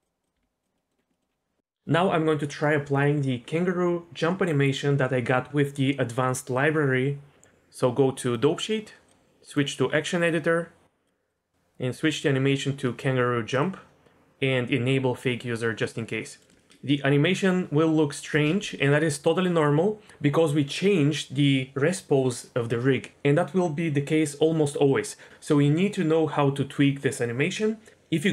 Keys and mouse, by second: 0.2 click, 0.3 r, 0.8 middle click, 1.2 click, 9.1-9.4 drag, 11.3-13.6 drag, 16.2 middle click, 16.7 space.